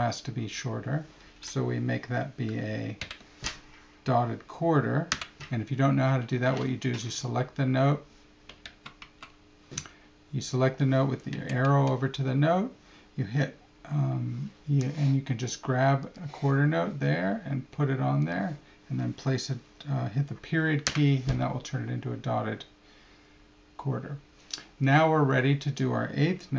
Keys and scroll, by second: 3.0 alt+∞, 8.6 super+z, 11.4 Right, 11.7 Left.